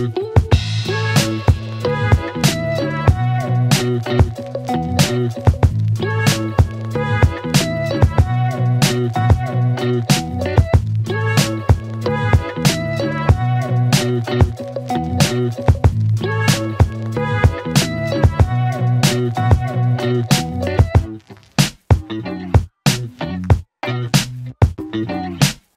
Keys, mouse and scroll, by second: 1.7-2.4 click, 3.1 right click, 5.0 click, 6.6 right click, 8.2 click, 14.1 space, 18.5 space, 20.0-24.3 click.